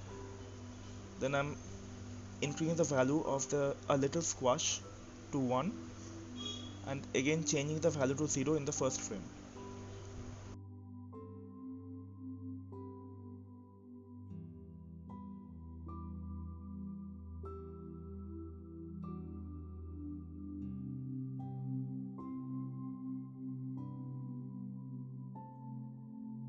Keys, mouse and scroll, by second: 7.5 click, 8.3-9.7 drag, 9.7-12.7 right drag, 12.7-14.3 drag, 14.3-15.4 right drag, 15.4 click, 16.6 click, 17.3-20.1 right drag, 20.1-23.1 drag.